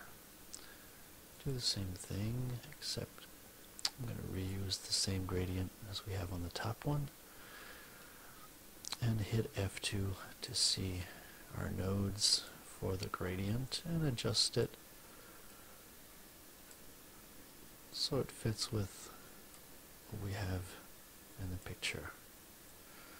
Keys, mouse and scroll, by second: 1.2 click, 2.8-4.6 drag, 9.3 F2, 10.4-12.6 drag, 13.4-14.7 drag, 15.4-16.8 drag, 17.8-19.6 drag, 20.3-21.7 drag, 22.6 click.